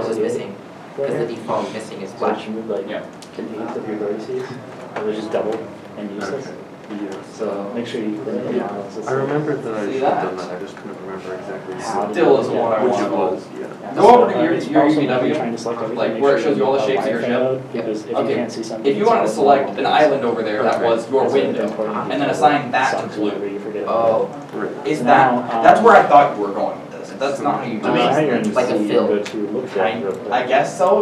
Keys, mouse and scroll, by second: 5.0 ctrl+z, 5.6-6.0 scroll up 1, 10.5-10.9 scroll down 1, 12.7 middle click, 12.7-13.0 scroll, 13.4 shift+middle click, 15.2 Tab, 15.9-16.2 scroll down 1, 17.4 a, 19.3 scroll up 1, 19.9 middle click, 21.1 scroll up 1, 22.1-22.8 scroll up 1, 22.8 shift+middle click, 23.0 scroll down 1.